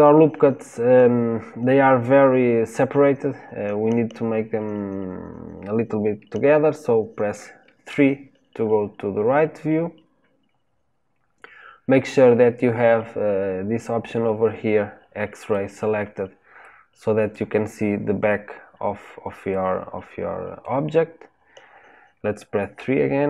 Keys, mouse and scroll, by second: 7.8 KP_3, 15.3 click, 16.5-22.5 middle drag, 22.7 KP_3.